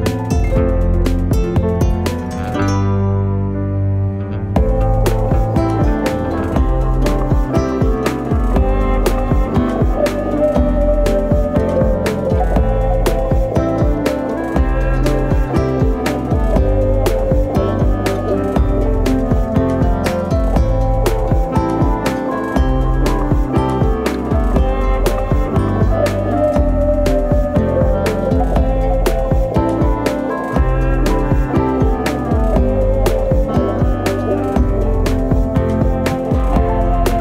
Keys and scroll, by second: 1.0-2.1 typing, 8.8-10.8 typing, 11.0 Return, 14.1-15.1 typing, 17.8 2, 18.0 Return, 32.1 shift+space, 34.5 space, 36.6 F10.